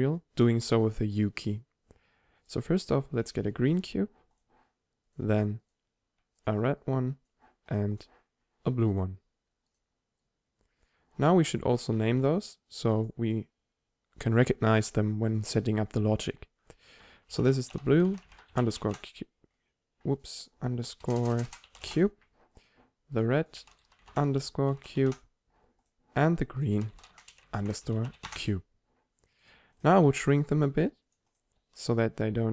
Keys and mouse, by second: 1.6-5.2 drag, 6.1-7.8 drag, 8.3 click, 9.8-11.6 drag, 12.3 n, 13.1-15.0 drag, 21.3 BackSpace, 21.4 BackSpace, 22.2-23.3 drag, 27.2 e, 30.2 s, 31.6 s.